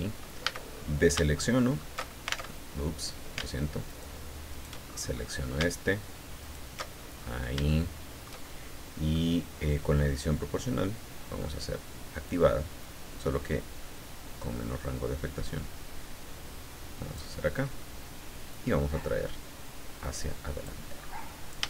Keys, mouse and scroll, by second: 0.4 a, 0.7-1.0 scroll up 2, 1.3 alt+shift+middle click, 2.5 alt+shift+Tab, 3.9 alt+shift+right click, 4.5 alt+shift+right click, 5.2-5.5 shift+scroll up 1, 6.4 alt+shift+right click, 6.9-7.5 alt+shift+scroll down 2, 7.7 shift+middle click, 8.7 shift+scroll down 3, 9.1 middle click, 12.3 click, 13.2-13.6 scroll up 2, 14.3-14.8 scroll down 4, 18.5-20.8 drag, 20.9-21.3 scroll up 2.